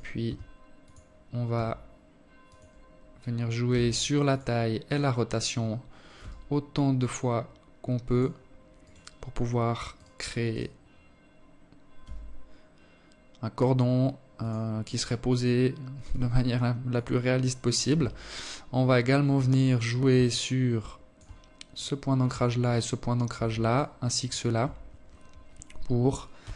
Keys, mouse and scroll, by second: 0.0 r, 2.2 s, 3.4 right click, 3.8 right click, 4.7 s, 7.3 right click, 8.5 right click, 9.0 right click, 10.5 s, 13.5 right click, 14.6 g, 16.4 KP_1, 17.2-18.2 scroll up 6, 18.8 alt+click, 20.2 right click, 21.2 shift+right click, 22.2 shift+right click, 22.7 shift+right click, 24.9 KP_1, 26.4 g.